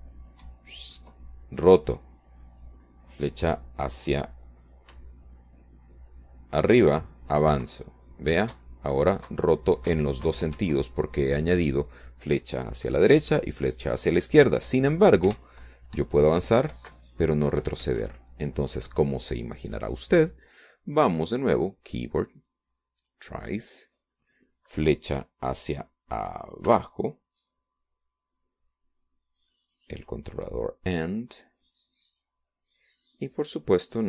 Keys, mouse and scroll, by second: 0.0 p, 3.5 Right, 8.0 Up, 10.7 Left, 11.6 Right, 12.3 Left, 13.0 Right, 13.3 Left, 13.6 Escape, 18.3 p, 19.0 Up, 20.0 Down, 20.9 Escape, 23.2 click, 24.6 click, 26.1 click, 26.4 middle click, 26.8 click, 29.8 Down, 32.7 click, 33.4 click.